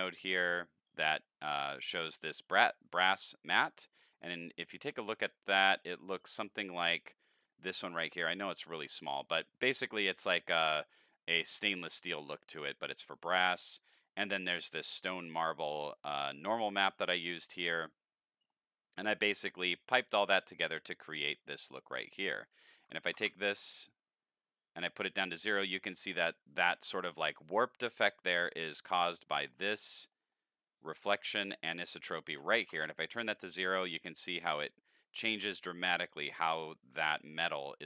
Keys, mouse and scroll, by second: 0.1 middle click, 0.8-1.5 drag, 3.9 click, 8.3 ctrl+middle click, 12.5 click, 13.6 middle click, 16.1-17.4 drag, 17.8 middle click, 19.1-20.3 drag, 22.2 click, 28.8 middle click, 29.7 scroll up 7, 30.1 middle click, 31.7 click.